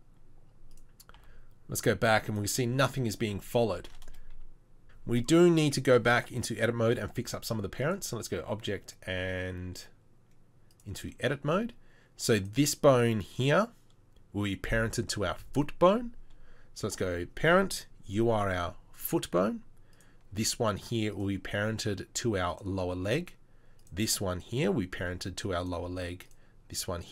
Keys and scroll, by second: 2.0 r.